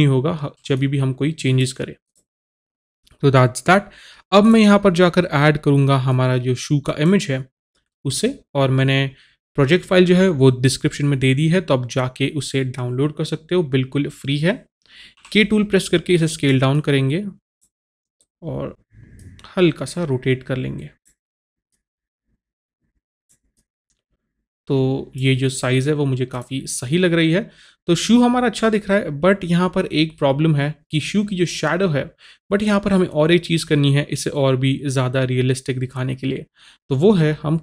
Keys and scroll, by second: 15.3 k.